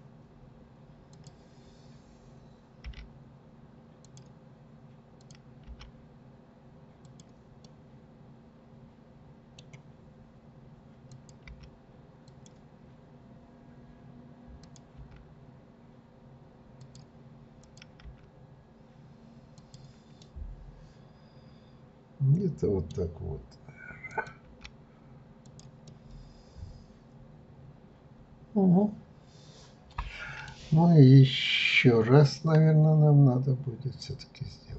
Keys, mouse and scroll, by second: 1.1 click, 2.9 g, 5.1 click, 5.7 g, 7.6-10.6 middle drag, 11.1 click, 11.5 g, 14.6 click, 15.0 g, 17.6 click, 18.0 g, 20.2-23.2 middle drag, 24.1 click, 24.5 g, 25.8-28.9 middle drag, 30.7-32.1 scroll down 1, 32.1-33.7 scroll down 1.